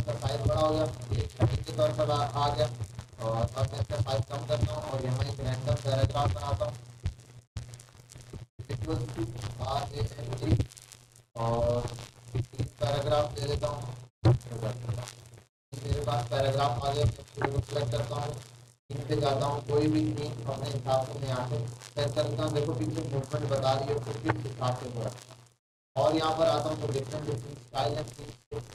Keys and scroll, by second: 0.0 ctrl+shift+., 9.4-10.5 typing, 17.3 ctrl+a.